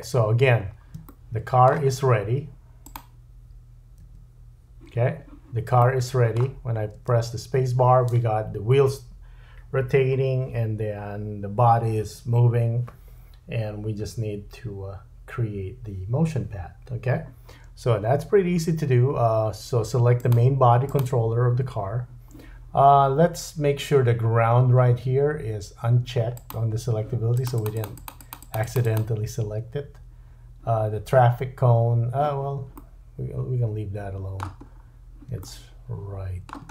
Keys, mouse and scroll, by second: 0.2-1.0 scroll up 5, 2.8 click, 4.0 KP_Decimal, 5.8 middle click, 7.0 space, 17.9 space, 18.7-20.2 scroll down 2, 20.2 click, 20.2 scroll down 1, 20.3-20.8 middle drag, 20.8 click, 26.4 click, 27.3 click, 27.6 click, 27.8 click, 27.9-28.4 drag, 31.8 click, 32.8 middle click, 34.6-35.3 scroll down 3, 35.4 shift+middle click, 35.8-36.7 shift+drag.